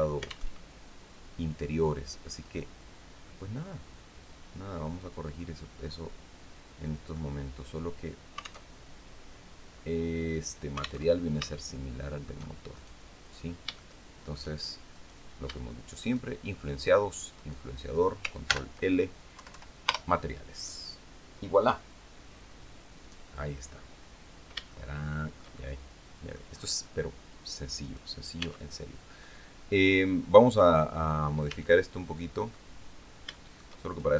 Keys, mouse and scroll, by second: 0.0 alt+Tab, 1.9 right click, 2.7-6.8 middle drag, 8.1 alt+Tab, 10.5 alt+Tab, 11.0 shift+middle click, 12.2 shift+right click, 13.3 shift+middle click, 14.4 right click, 15.4 shift+right click, 16.9 shift+right click, 17.9 ctrl+shift+l, 18.8 Down, 19.4 Return, 23.5-23.9 scroll down 2, 24.2-26.0 shift+middle drag, 26.0 scroll up 2, 27.3 right click, 27.9 Tab, 28.6-30.1 middle drag, 30.3 scroll up 2, 30.9 a, 31.4 middle click, 32.4 scroll up 2, 32.8 shift+middle click.